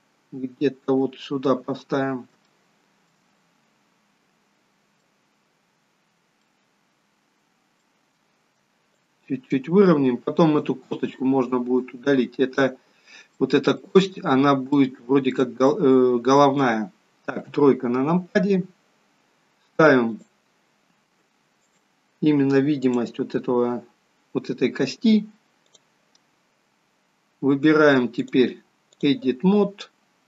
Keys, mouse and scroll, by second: 1.7-2.2 scroll up 4, 2.5 shift+middle click, 3.3 middle click, 6.4 middle click, 9.0 click, 11.8 click, 13.4 shift+middle click, 14.3-14.7 scroll up 2, 14.8 shift+middle click, 16.4 middle click, 17.5 KP_3, 20.7 click, 21.7 click, 26.1 click, 28.2 click.